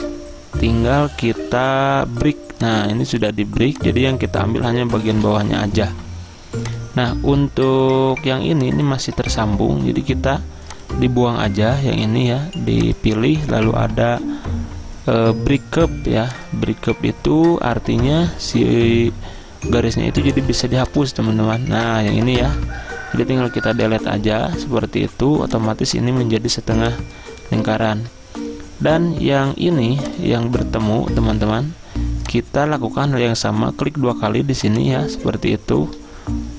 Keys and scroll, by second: 5.2 Delete, 9.3 ctrl+z, 22.6 ctrl+z, 23.8 Delete, 28.0 ctrl+z.